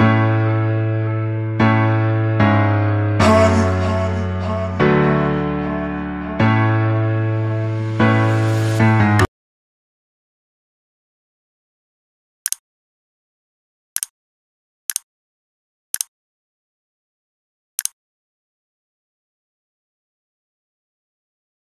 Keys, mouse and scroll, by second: 1.9 click, 5.4 click, 5.9 v, 7.2 click.